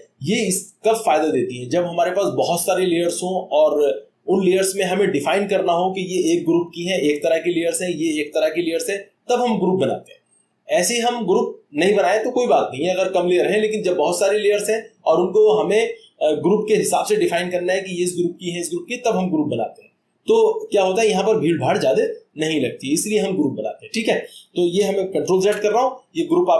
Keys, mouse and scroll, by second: 25.4 click.